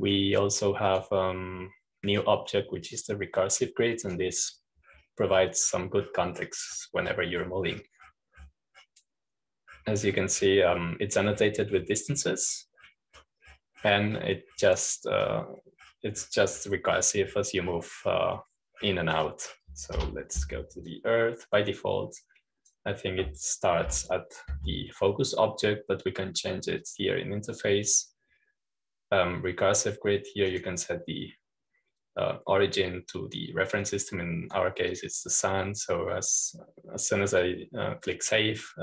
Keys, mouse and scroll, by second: 2.8 click, 4.8-6.8 drag, 6.8-7.6 scroll down 1, 7.6-10.6 scroll down 1, 21.9 Home, 22.8-25.4 drag, 25.8 p, 28.8 click, 32.4 click, 36.9-38.0 drag.